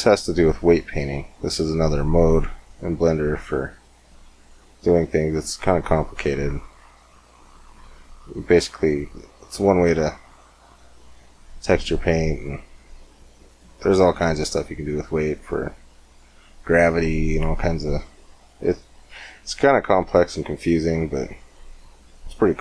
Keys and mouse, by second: 5.3-13.2 drag, 13.3-17.9 drag, 19.8 Tab, 20.8 Tab.